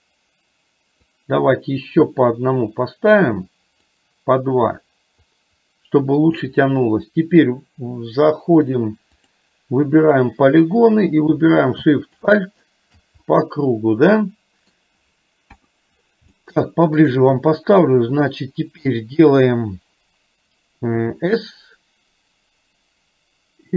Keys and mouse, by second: 1.3-3.2 drag, 3.9-6.4 drag, 10.1 click, 12.2 click, 13.3-14.8 middle drag, 15.6 KP_1, 16.4 shift+middle click.